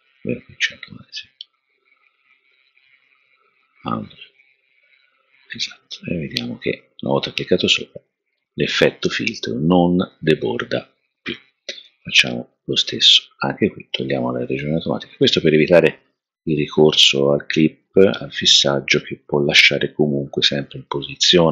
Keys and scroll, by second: 17.3 0.